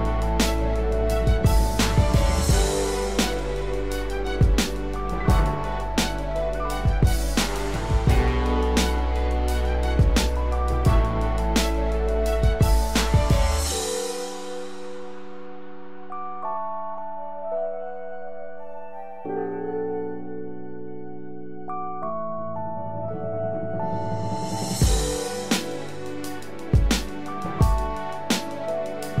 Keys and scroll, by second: 17.9 ctrl+-, 28.8 ctrl+z.